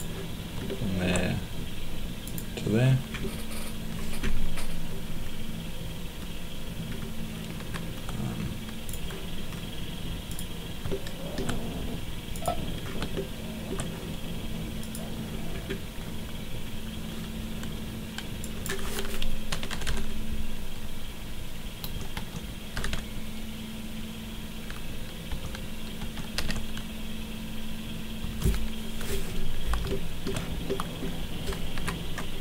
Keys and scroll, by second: 7.6 Escape, 19.2-20.2 typing, 21.8-23.2 typing, 25.3-26.9 typing, 28.2 Return, 31.7 Escape.